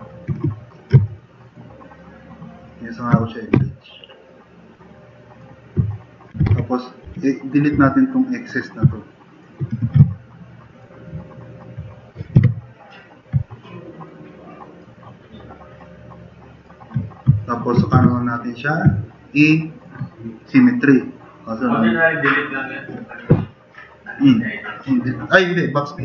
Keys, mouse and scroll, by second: 1.2 drag, 2.7-3.0 drag, 3.6 b, 5.2 middle click, 5.9 middle drag, 6.2-7.8 typing, 8.3 click, 9.0-9.4 drag, 12.4 BackSpace, 18.0 4.